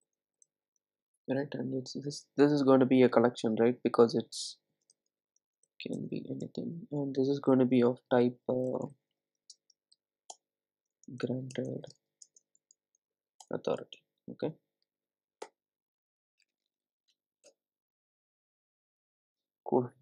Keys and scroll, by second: 10.4 Return.